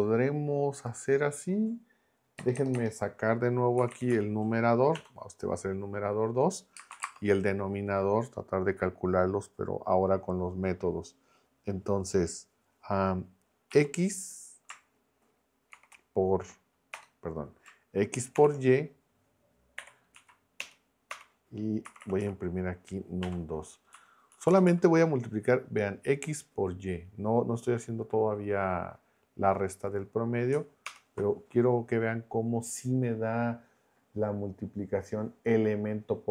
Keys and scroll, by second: 2.4 BackSpace, 3.5-4.9 typing, 6.8 space, 6.9 =, 7.0 space, 13.7 x, 15.7 shift+9, 16.9 BackSpace, 20.1 Right, 20.6 Return, 21.1 Return, 21.6-23.2 typing, 23.9 Up, 24.3 Right, 30.8 ctrl+Return.